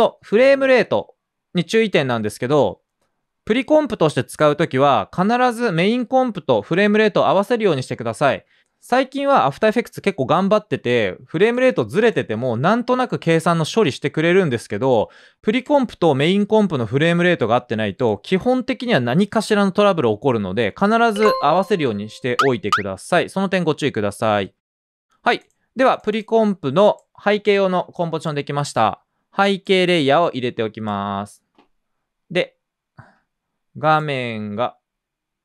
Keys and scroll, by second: 13.2-14.0 typing, 24.3-24.9 typing, 32.1-33.0 typing.